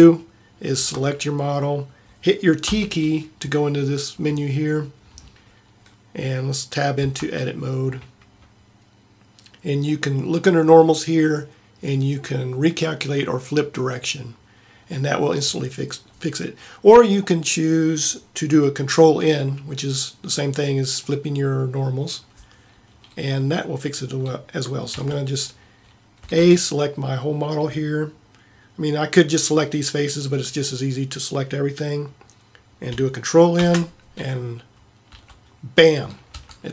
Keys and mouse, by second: 2.8 t, 7.2 Tab, 25.0 a, 26.2 a, 33.7 ctrl+n, 35.2 a, 36.5 Tab.